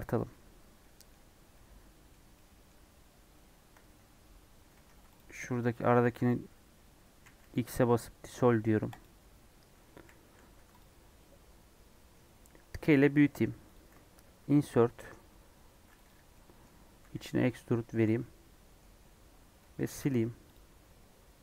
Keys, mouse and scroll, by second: 0.4-0.7 scroll up 2, 0.7 middle click, 1.2-1.7 scroll down 1, 1.7-3.7 middle drag, 3.7 Tab, 4.6 2, 5.1 alt+click, 8.9 x, 9.9 1, 10.2 2, 10.5 3, 10.7 click, 11.1-12.7 middle drag, 12.7 s, 14.3 i, 16.3 middle click, 17.0 e, 18.2-20.5 middle drag, 20.5 x, 20.8-21.4 middle drag.